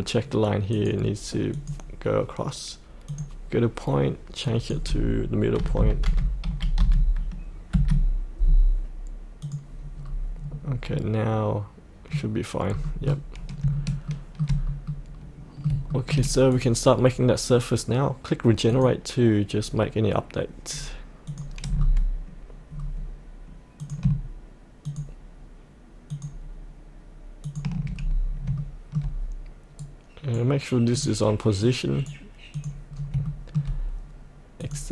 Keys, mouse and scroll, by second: 0.7 click, 5.6 KP_8, 6.1 KP_7, 6.4 KP_Decimal, 6.8 KP_5, 9.4 click, 10.0 scroll up 1, 10.3-10.9 scroll down 1, 10.9-12.7 middle drag, 12.7-13.0 scroll up 1, 14.0 shift+scroll up 1, 14.6 scroll up 1, 14.9 middle click, 15.9 shift+middle click, 16.5 click, 21.7-22.7 scroll down 1, 23.8 click, 24.8 ctrl+click, 26.1 ctrl+click, 27.4 ctrl+click, 27.9-28.5 scroll up 1, 28.5 shift+middle click, 29.8 right click, 30.9 click, 31.6 right click, 32.5 click, 32.9 scroll up 1, 33.2 shift+middle click, 34.6 click.